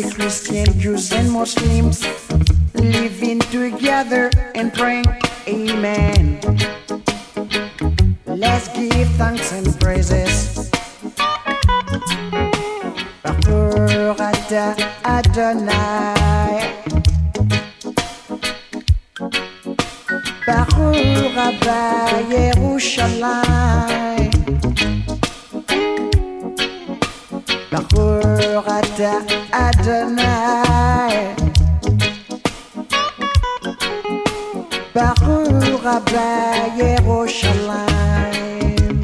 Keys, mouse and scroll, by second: 1.0 shift+click, 2.6-3.6 drag, 6.8 shift+click, 9.9 ctrl+click, 11.8 shift+click, 13.4 shift+click, 15.1 shift+click, 16.2 shift+click, 17.8 ctrl+click, 19.0 ctrl+click, 21.3 shift+click, 22.6 shift+click, 25.8 ctrl+click, 31.5-32.1 alt+scroll, 33.5 shift+click, 34.5-35.0 alt+scroll.